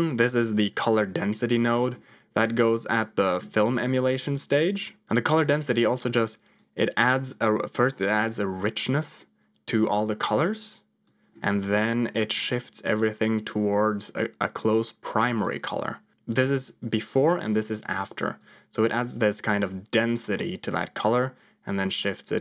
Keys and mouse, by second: 0.0 middle click, 0.8 middle click, 1.7 middle click, 5.7 click, 6.9 click, 7.8-10.9 drag, 11.5 middle click, 12.2-15.3 drag, 16.4 m, 17.1 m, 18.3-20.9 drag, 21.3-22.4 drag.